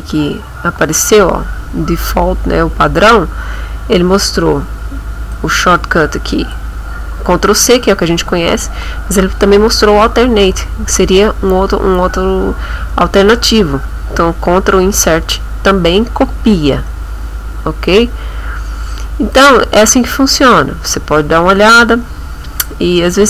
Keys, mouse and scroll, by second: 5.3-6.7 drag, 19.3 click, 22.5-22.9 scroll down 2.